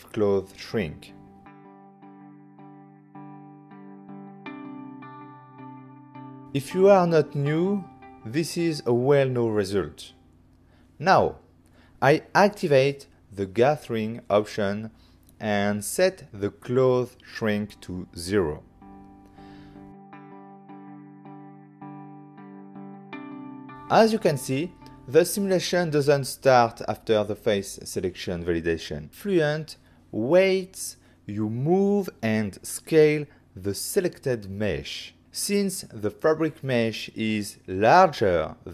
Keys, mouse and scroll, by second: 0.1 Return, 1.9 click, 2.9 f, 3.4 click, 3.8 click, 4.6 Return, 7.0 middle click, 10.5 shift+middle click, 11.2 middle click, 11.5 click, 12.0 f, 13.3 click, 15.2 click, 16.3 click, 16.3 click, 17.0 0, 17.3 Return, 18.8 click, 19.9 Delete, 19.9 click, 20.3 f, 21.7 click, 22.8 click, 25.5 Return, 30.6 g, 30.7 z, 34.1 click, 35.3 s, 37.5-38.4 typing.